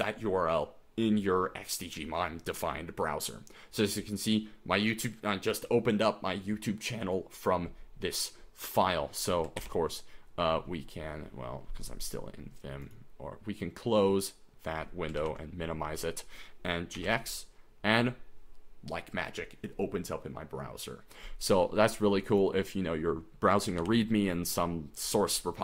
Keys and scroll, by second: 9.6 ctrl+w, 15.2 super+n, 16.7-17.5 typing, 23.8 super+n.